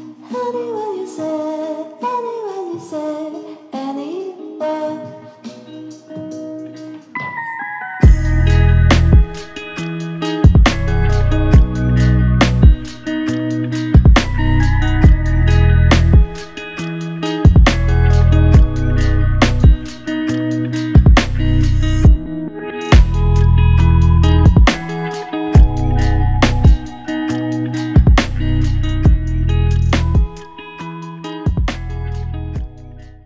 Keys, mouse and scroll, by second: 3.9 alt+click, 5.4 f, 7.0 shift+click, 12.2 shift+click, 14.4 shift+click, 16.3 alt+click, 24.0 ctrl+alt+click, 26.7 alt+shift+click, 28.0 alt+click.